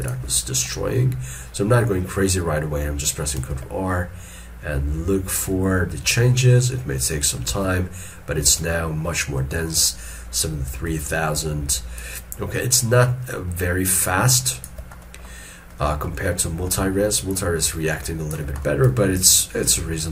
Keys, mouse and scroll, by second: 0.1 shift+click, 0.9 middle click, 2.9 middle click, 3.5 ctrl+r, 7.6 alt+e, 8.6 alt+e, 11.2 shift+click, 12.3 shift+click, 15.1 middle click, 16.1 shift+middle click, 16.8 scroll down 1, 17.4 shift+click, 18.7 middle click, 19.3 shift+click.